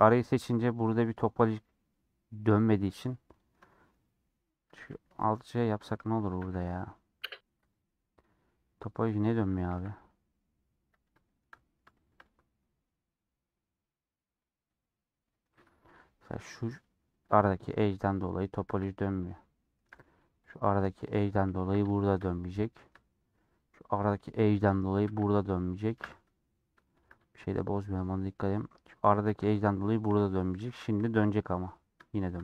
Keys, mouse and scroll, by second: 0.7 KP_Decimal, 1.4-3.8 middle drag, 3.8 scroll up 1, 4.1 middle click, 4.8 a, 5.2-6.5 middle drag, 6.5 alt+j, 7.9 alt+click, 8.1-9.4 middle drag, 9.4 1, 10.0-15.1 middle drag, 17.3 click, 18.7 ctrl+x, 19.1-20.4 shift+middle drag, 20.4 click, 21.1 click, 21.7 ctrl+x, 21.9-23.3 shift+middle drag, 23.3 scroll up 1, 24.0 click, 24.4 click, 25.1 ctrl+x, 25.7 shift+middle click, 26.1 1, 26.8-28.9 shift+middle drag, 28.9 click, 30.7-32.0 alt+drag, 32.0-32.4 shift+middle drag.